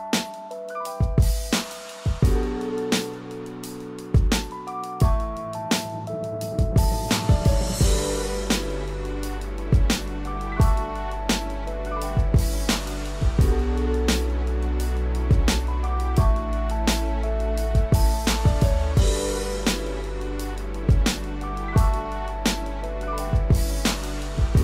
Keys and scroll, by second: 1.2 ctrl+0.